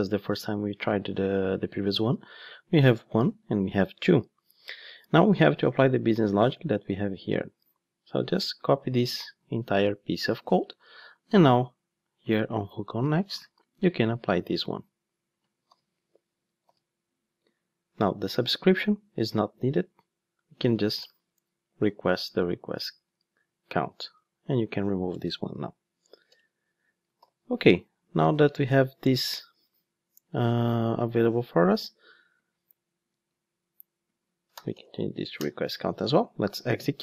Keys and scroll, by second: 9.4 super+c, 13.3 super+v, 15.6 super+/, 16.6 alt+super+l, 27.2 alt+super+l, 35.4 Return, 36.4 ctrl+shift+d.